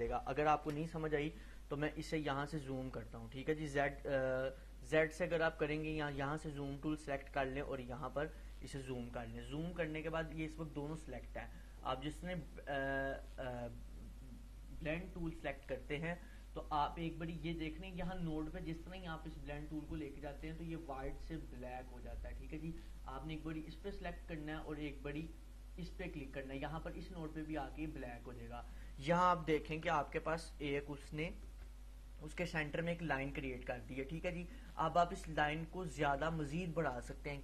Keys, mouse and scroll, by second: 0.7 ctrl+z, 2.5-3.2 scroll up 1, 6.6-8.1 drag, 15.4 click, 23.8 click, 28.0 click, 29.9 ctrl+-.